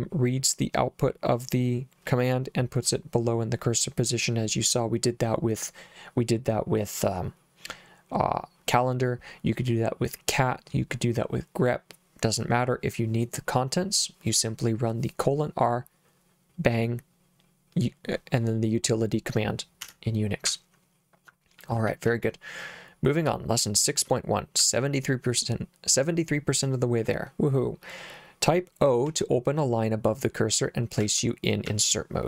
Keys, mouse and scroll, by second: 19.8 Escape, 20.4 h, 21.5 j, 21.9 j, 22.0 j, 23.3 j, 24.6 j, 29.1 k, 31.0 j, 31.7 j.